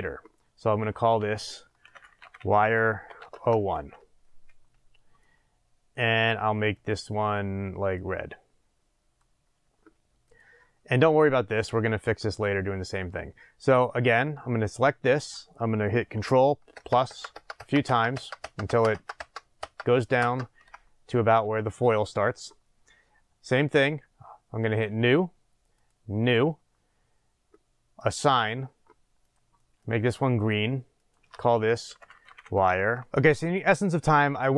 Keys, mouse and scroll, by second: 3.4 Return, 5.6-7.9 middle drag, 7.9 click, 10.2-14.0 drag, 16.7 ctrl+KP_Add, 24.8-29.8 drag, 31.9-32.9 drag.